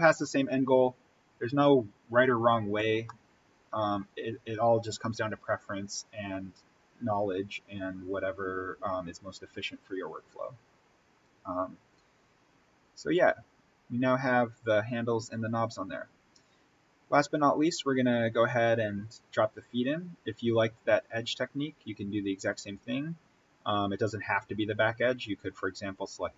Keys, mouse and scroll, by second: 2.9 scroll up 1, 3.1-5.4 middle drag, 5.4-6.4 scroll up 1, 8.2-8.5 scroll down 1, 13.5-14.1 scroll up 1, 16.0-16.6 scroll up 1, 21.3 scroll, 25.9 click.